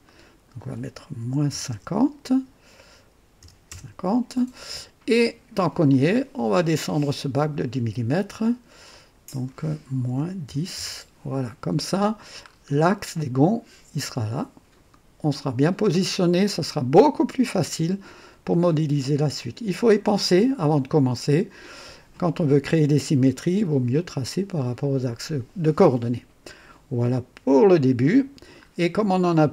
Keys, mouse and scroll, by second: 0.0 click, 1.1 KP_Subtract, 1.4 KP_5, 1.6 KP_2, 3.3 BackSpace, 3.6 KP_0, 4.7 typing, 5.3-5.6 scroll down 1, 5.8 click, 8.8 click, 10.0 KP_Subtract, 10.4 KP_1, 10.7 KP_0, 12.4 scroll up 1, 16.3-17.1 drag, 17.5-18.2 drag, 19.3-19.9 drag, 20.2-22.1 drag, 27.4 click, 28.6 scroll down 1, 29.2 click.